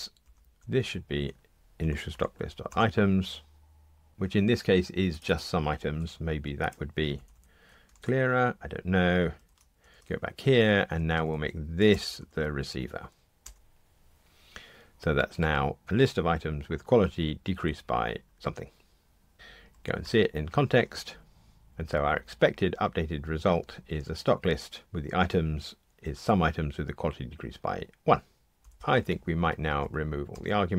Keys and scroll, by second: 2.7 Return, 5.9 super+c, 7.1 alt+Up, 7.9 super+v, 10.0 super+b, 11.9 alt+Return.